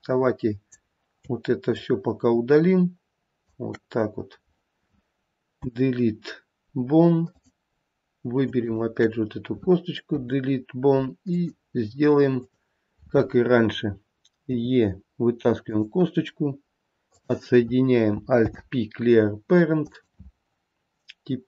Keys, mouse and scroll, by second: 0.1 click, 2.0 shift+click, 5.8 Delete, 8.9 shift+click, 10.4 Delete, 12.6 click, 14.8 e, 17.3 click, 18.7 alt+p.